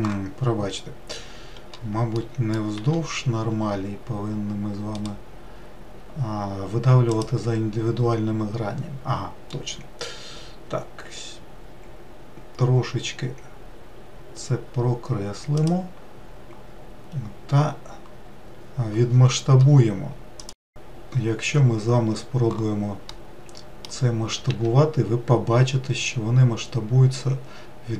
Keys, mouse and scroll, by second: 2.4 middle click, 3.0 e, 5.2-8.2 right drag, 23.1-24.5 middle drag, 24.5 s.